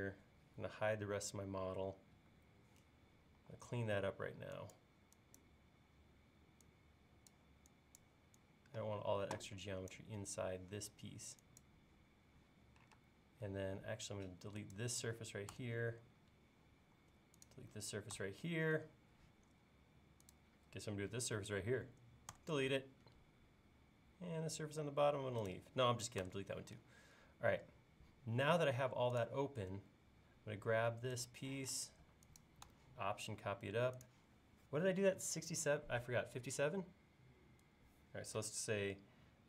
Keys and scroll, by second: 2.4 q, 3.4 e, 13.0 space, 15.6 BackSpace, 18.2 BackSpace, 22.4 BackSpace, 26.3 BackSpace, 31.6 m.